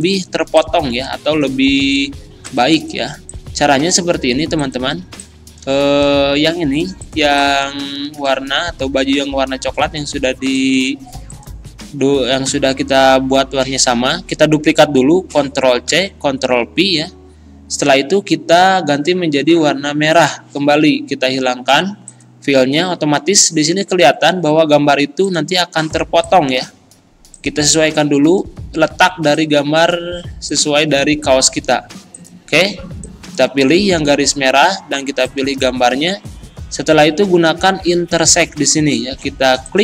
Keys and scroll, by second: 8.2 ctrl+z, 16.0 ctrl+c, 34.0 ctrl+z.